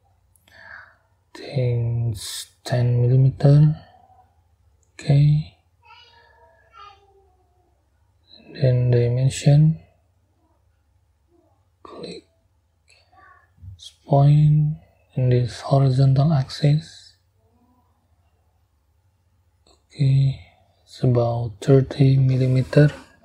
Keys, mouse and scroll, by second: 0.0 middle click, 2.3 1, 2.9 0, 4.7 click, 5.9-6.3 scroll down 2, 6.4-7.1 scroll up 4, 13.6 click, 14.2-14.5 scroll down 2, 17.2 click, 19.0 click, 21.4 3, 21.8 0.